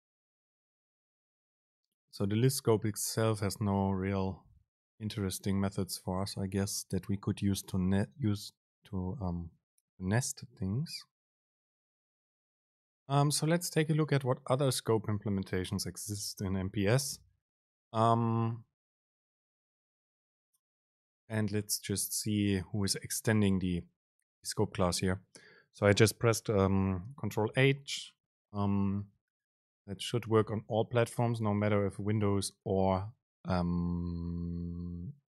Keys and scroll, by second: 18.6 ctrl+h, 31.5 ctrl+h.